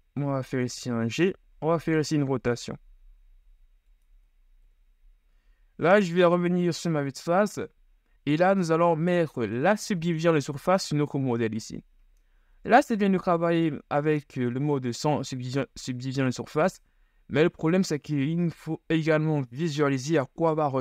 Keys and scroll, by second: 4.9 KP_1, 5.5 z, 12.7 KP_1.